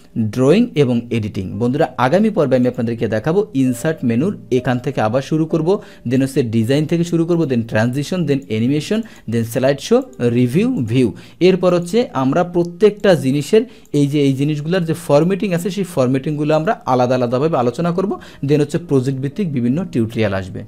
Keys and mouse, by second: 2.6 click, 6.2 click, 7.3 click, 8.3 click, 9.0 click, 10.1-10.9 drag, 11.7 click, 13.1-20.2 drag.